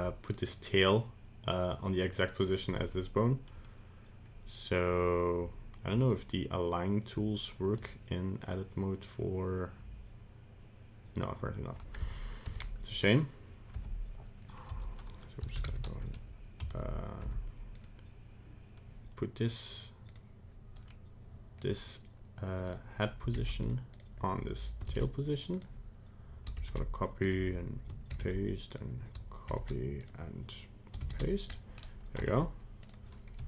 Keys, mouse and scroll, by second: 0.2 right click, 2.2 right click, 6.1 click, 7.7 click, 11.1 click, 12.0 Tab, 12.4 Tab, 13.7 Tab, 14.7 a, 15.5 alt+r, 15.6 alt+g, 16.6 alt+s, 17.2 Tab, 17.7 right click, 20.1 right click, 22.6 click, 23.9 right click, 24.8 ctrl+v, 25.5 right click, 26.5 ctrl+c, 27.2 right click, 28.1 ctrl+v, 28.7 right click, 29.4 ctrl+c, 30.0 right click, 31.0 ctrl+v, 31.5 middle click, 32.2 Tab, 32.8 right click, 33.3 g.